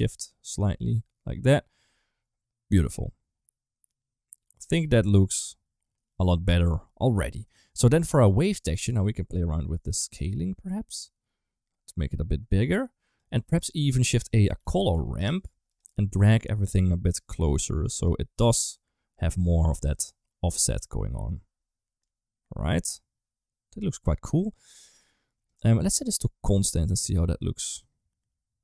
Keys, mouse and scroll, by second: 3.3-5.8 middle drag, 6.1 middle click, 7.4 click, 7.8 click, 8.5-12.2 drag, 12.5-13.1 drag, 13.2 g, 13.6 click, 13.8 shift+a, 16.1-17.9 drag, 18.5-19.7 drag, 19.9-21.1 middle drag, 21.9-23.9 drag, 24.7 click, 25.8 click, 27.6-28.6 drag.